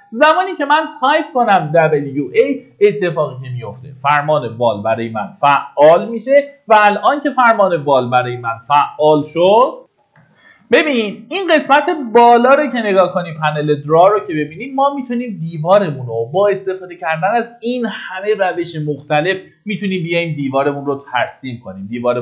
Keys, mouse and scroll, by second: 5.4 click, 9.9 F9, 12.9-17.7 drag.